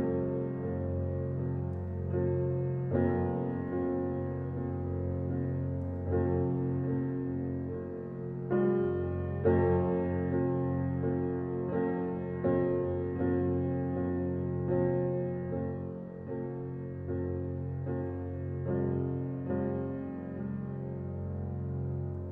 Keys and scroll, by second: 4.8 [.